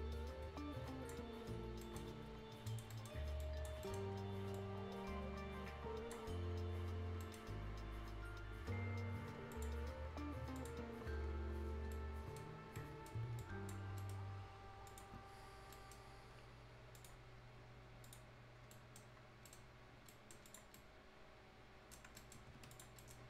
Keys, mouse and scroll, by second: 1.8 shift+right click, 2.0 shift+scroll down 1, 2.2-2.6 shift+scroll up 1, 2.7 shift+click, 2.9 shift+right click, 3.4 shift+click, 3.8 ctrl+shift+right click, 4.5-6.4 shift+drag, 6.4 shift+scroll up 1, 7.2 shift+right click, 7.4 shift+scroll down 1, 7.8-8.1 shift+scroll up 1, 8.8 scroll up 1, 9.2 shift+scroll down 1, 9.5 shift+click, 11.9 shift+right click, 12.4-12.8 shift+scroll up 1, 12.8 shift+right click, 13.1 shift+scroll down 1, 13.4 shift+click, 13.8 shift+scroll up 1, 14.0 shift+right click, 14.9 shift+click, 15.2 shift+scroll up 1, 15.7 shift+right click, 16.1 shift+scroll up 1, 17.4 shift+click, 18.5 shift+scroll down 1, 18.7 shift+right click, 19.1 shift+scroll up 1, 19.5 shift+right click, 20.5 shift+click, 20.7-22.1 shift+right drag, 22.2 shift+right click, 22.7 click, 23.0 right click, 23.0 right click.